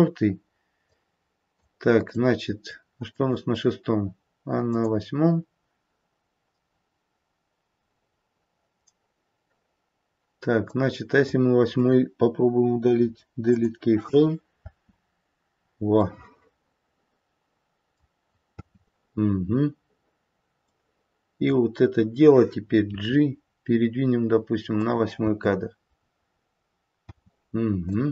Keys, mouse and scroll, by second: 0.8 click, 1.9 click, 4.8 click, 10.6 click, 12.8 Delete, 14.5 space, 16.8 middle click, 18.6 middle click, 18.6 space, 20.6 click, 22.9 g, 25.1 space, 27.1 space, 27.8 click.